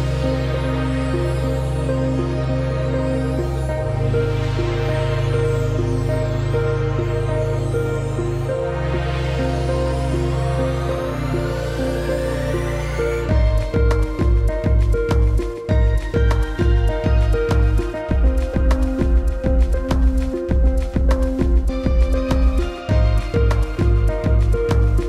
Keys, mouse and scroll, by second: 0.1 click, 0.3-3.4 typing, 0.5 click, 3.8 ctrl+Return, 5.2 shift+click, 11.5 click, 13.0 alt+scroll up 1, 13.2 click, 18.5 alt+scroll down 1, 19.0 click, 19.2 space, 20.2 click, 20.6 space, 21.5 click, 22.0 space, 22.5 click, 24.2 space, 24.4 click, 24.5 space.